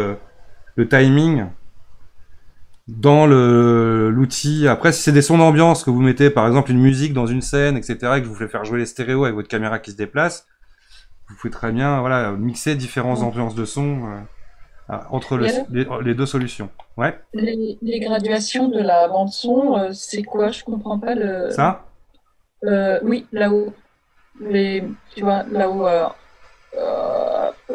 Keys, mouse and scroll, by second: 0.0-0.6 scroll down 3, 4.5-7.7 drag, 16.4-19.5 middle drag.